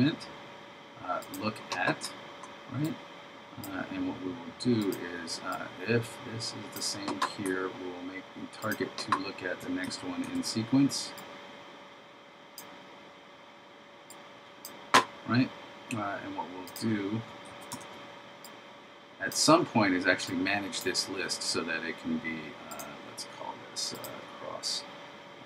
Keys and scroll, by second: 10.0 super+c, 10.3 super+v, 17.6 super+c, 17.8 super+v.